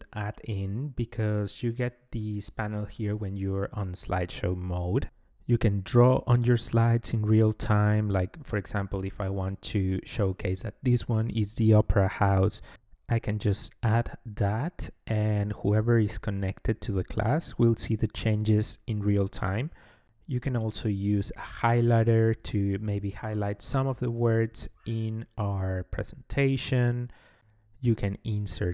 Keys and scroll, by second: 12.0-16.1 typing.